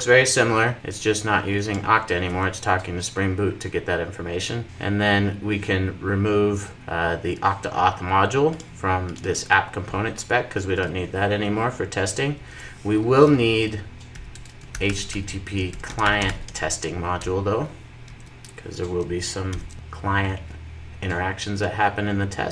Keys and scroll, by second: 17.2 Return, 17.8 super+s, 19.4 alt+super+l, 19.7 super+s.